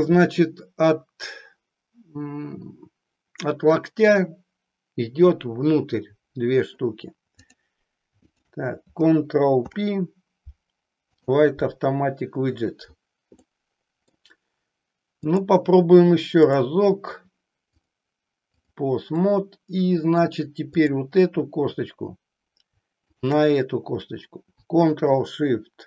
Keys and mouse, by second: 7.4 click, 8.3 shift+click, 9.6 ctrl+p, 13.4 middle click, 15.2 click, 17.7 click, 19.3 middle click, 20.8 click, 23.1 shift+click.